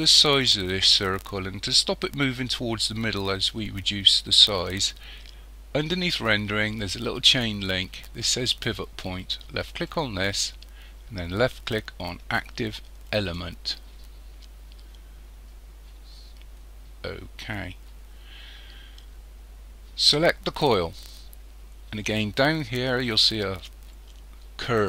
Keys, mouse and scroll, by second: 9.7 click, 20.0 click.